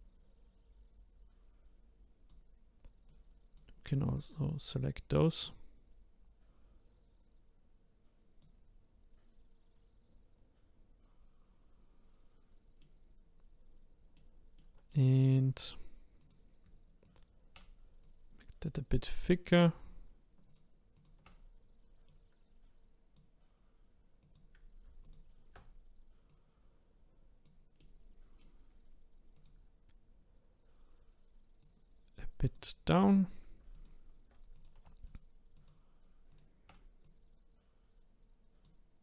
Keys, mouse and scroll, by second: 3.1-4.1 drag, 12.8 middle click, 14.6 middle click, 15.3 middle click, 16.2 click, 17.0 shift+click, 18.0 click, 20.4 shift+click, 20.9 shift+click, 22.1 click, 24.2 click, 25.0 alt+click, 26.3 click, 27.8-29.3 middle drag, 29.3 click, 31.6 click, 33.2 click, 33.7 alt+click, 34.5 click, 35.0 shift+click, 35.5 shift+click, 36.3 shift+click, 37.0 click.